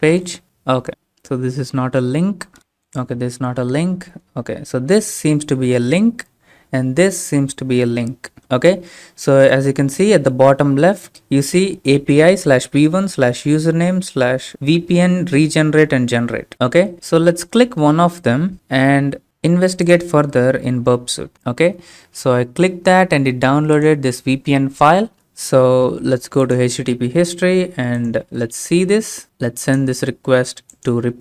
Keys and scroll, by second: 25.1 alt+Tab.